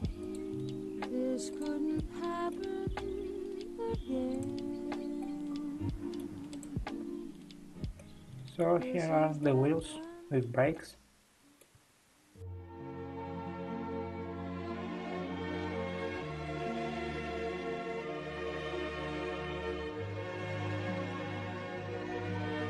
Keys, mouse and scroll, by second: 0.8-1.3 scroll down 5, 1.6 click, 1.9-5.5 middle drag, 5.5 click, 5.6-6.7 middle drag, 6.7 click, 7.4-8.0 scroll down 2, 8.0-8.8 middle drag, 8.8-9.4 scroll down 2, 9.4-12.9 middle drag, 12.9 click, 14.2 `, 14.8-22.6 middle drag.